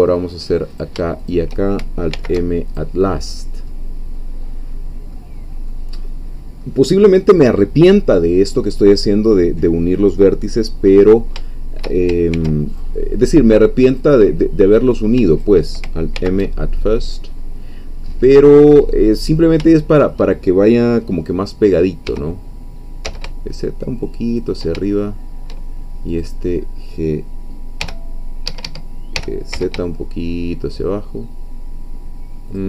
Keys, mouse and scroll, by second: 0.8 shift+click, 2.1 alt+m, 2.7 alt+click, 3.2-3.7 alt+scroll down 3, 3.7-5.3 middle drag, 5.3-5.7 scroll down 2, 5.7-6.8 middle drag, 10.8-11.3 scroll up 2, 11.5 shift+middle click, 12.3 ctrl+shift+r, 12.7 ctrl+click, 13.9-15.0 drag, 15.4 shift+click, 16.1 alt+m, 17.0-18.8 drag, 19.3-19.7 scroll up 3, 19.7 shift+middle click, 22.1 g, 23.1 z, 24.3 shift+click, 24.9-26.0 shift+middle drag, 26.2-27.8 drag, 27.8 g, 28.5 Escape, 29.1 g, 29.5 z, 32.5 shift+click.